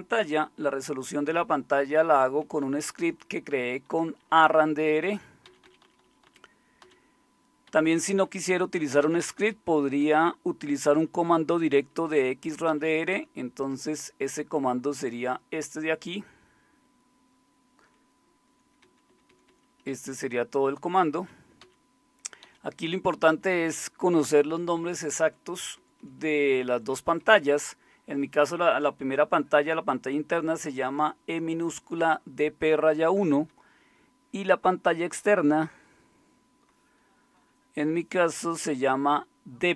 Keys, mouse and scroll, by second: 1.6-2.8 typing, 3.9-10.0 typing, 11.7-12.7 typing, 13.1 Right, 13.6 Right, 14.3-18.3 typing, 18.4 Right, 19.1 Right, 20.1 Left, 20.7-21.2 Left, 21.6 Down, 22.4 Up, 23.5 Up, 24.3 Right, 25.0 Right, 25.1 Right, 25.3 Right, 25.8 Right, 26.4 Right, 26.7 Right, 32.7 Right, 32.9 Right, 33.1 Right, 33.3 Right, 33.5-38.4 Right.